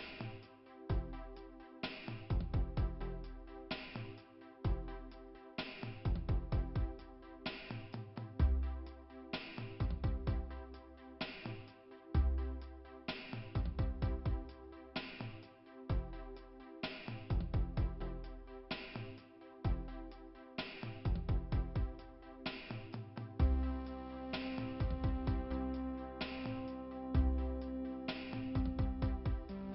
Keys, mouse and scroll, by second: 1.5 click, 1.9 click, 4.6 click, 8.6 click, 10.3 click, 14.5 right click, 15.0 right click, 15.3 right click, 16.3 click, 17.1 click, 17.3 click, 18.5 click, 19.7 click, 21.3 middle click, 22.7 click, 23.6 click, 23.9 click, 25.1 middle click, 26.2-27.3 scroll up 2, 28.4 click.